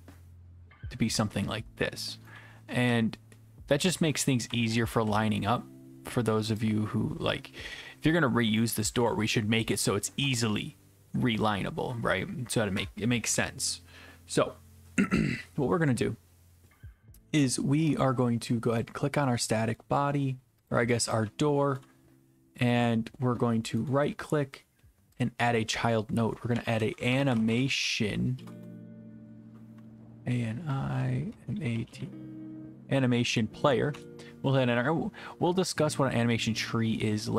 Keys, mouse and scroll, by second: 2.0 click, 2.3-5.0 typing, 5.4 click, 8.6 click, 8.7-10.2 typing, 10.2 right click, 17.3-17.9 typing, 17.9 right click, 18.8 click, 19.8 right click, 20.7 click, 21.3 e, 21.8 right click, 23.9 right click, 25.2-26.2 drag, 26.3-29.0 typing, 30.6-32.5 typing, 33.9 Return.